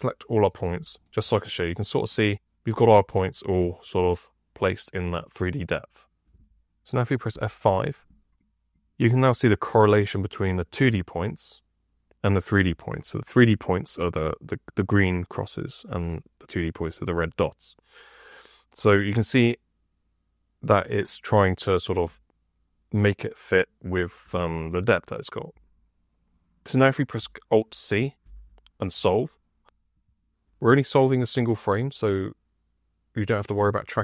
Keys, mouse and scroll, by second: 7.2 F5, 28.1 alt+c.